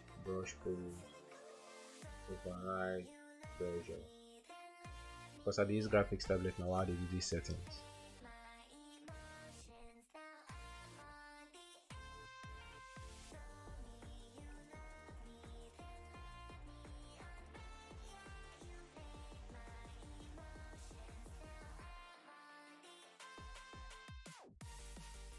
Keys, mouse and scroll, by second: 11.8 space, 14.1-22.0 typing, 16.4 double click, 23.8-25.3 typing.